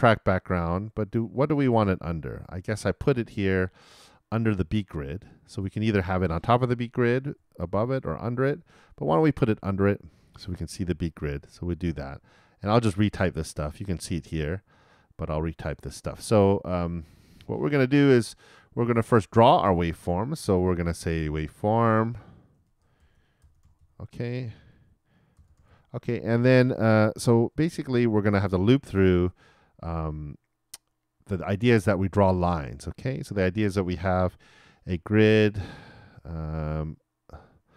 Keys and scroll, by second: 22.4-23.3 typing.